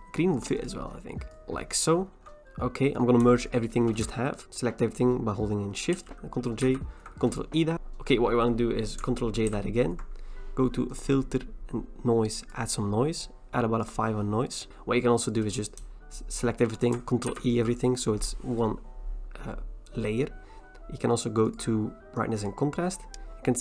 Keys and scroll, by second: 6.0 ctrl+j, 6.7 ctrl+e, 9.5 ctrl+j, 17.3 ctrl+e.